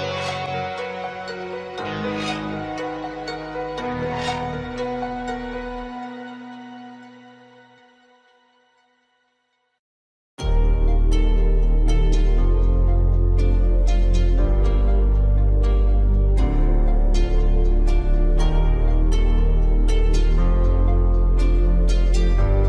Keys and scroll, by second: 5.2 ctrl+0.